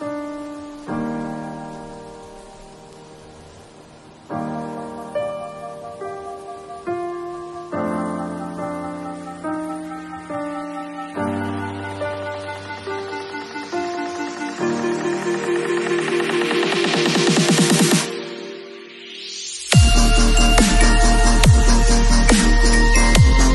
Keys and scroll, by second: 5.8 super+z, 6.4 super+3, 7.4 ], 8.8 [, 17.6 v.